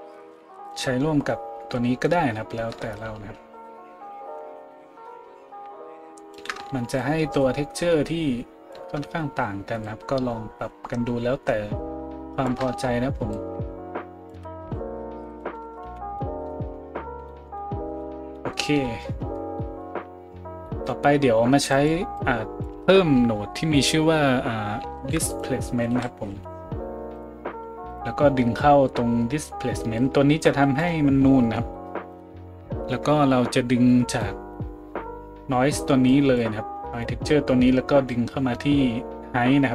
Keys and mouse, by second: 21.8 middle click, 22.2-27.9 drag, 25.0 shift+a, 27.9-29.9 middle drag, 29.9-39.7 drag.